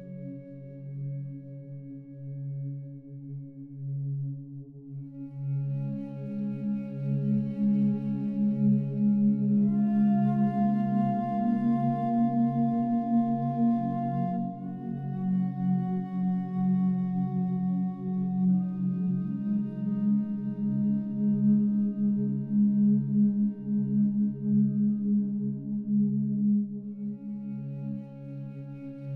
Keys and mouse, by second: 0.3 click, 0.6 click, 1.1 click, 1.5 click, 1.8 click, 2.2 click, 2.6 click, 2.9 click, 3.2 click, 3.5 click, 3.7 click, 4.3 click, 4.6 click, 5.1-7.5 alt+drag, 6.8 ctrl+z, 7.1 ctrl+z, 7.5 ctrl+z, 7.7 ctrl+z, 8.1 ctrl+z, 8.4 ctrl+z, 8.5 ctrl+z, 8.9 ctrl+z, 9.3 ctrl+z, 9.7 ctrl+z, 10.7 ctrl+z, 11.3-12.5 alt+drag, 12.7 ctrl+alt+click, 13.2 alt+click, 13.8 alt+click, 14.3 ctrl+alt+click, 14.8 alt+shift+click, 16.0-17.3 drag, 17.5 alt+click, 19.9 f, 20.5 click, 21.1-22.3 drag, 22.4 alt+click, 23.6 click, 24.8 alt+click, 25.9-27.4 drag, 27.6 alt+click, 28.8 alt+click.